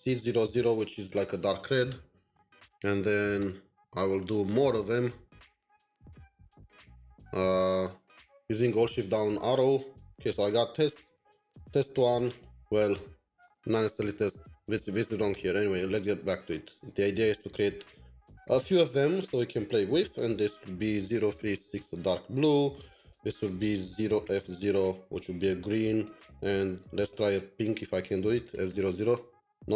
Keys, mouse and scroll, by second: 0.0-0.7 typing, 1.0 Escape, 1.5 End, 2.8 Up, 3.0 Down, 3.3 Return, 3.7 Up, 3.8 Up, 4.7 shift+Down, 5.1 Up, 5.5 shift+Down, 5.8 shift+Down, 5.8 shift+Down, 6.0 shift+Down, 7.0 alt+shift+Down, 7.2 alt+shift+Down, 7.4 alt+shift+Down, 17.0 typing, 20.1-22.2 typing, 20.1 double click, 23.1 double click, 26.0-26.7 typing, 26.2 double click, 28.2-29.0 typing.